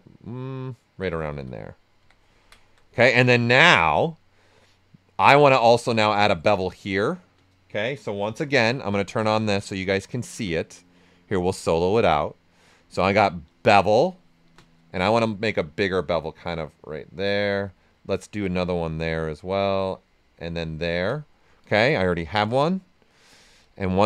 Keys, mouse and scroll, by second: 1.2 ctrl+right click, 2.0 q, 2.3 ctrl+right click, 2.8 alt+right click, 6.5 space, 7.9 space, 8.0 shift+f, 8.7 shift+d, 9.4 right click, 9.7-11.3 ctrl+right drag, 11.3 click, 13.1 space, 15.1-17.7 drag, 17.7 right click, 18.4 click, 18.8 right click, 20.8 ctrl+right click, 21.9-23.6 drag.